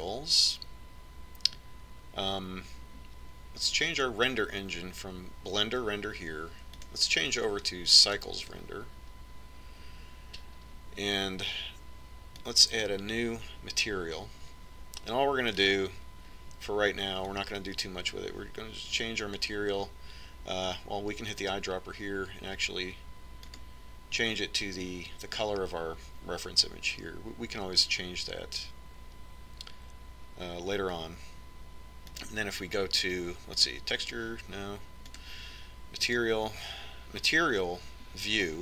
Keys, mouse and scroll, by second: 0.7-2.6 drag, 8.2-15.5 drag, 17.1-18.7 drag, 33.7-35.4 drag, 36.6-38.6 drag.